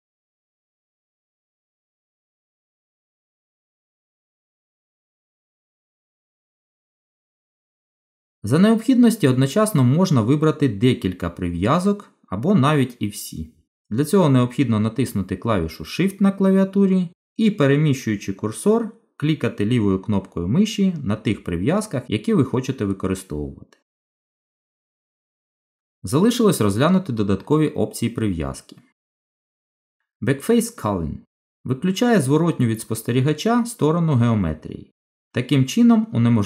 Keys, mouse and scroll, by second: 1.2 right click, 4.5 middle click, 10.1 click.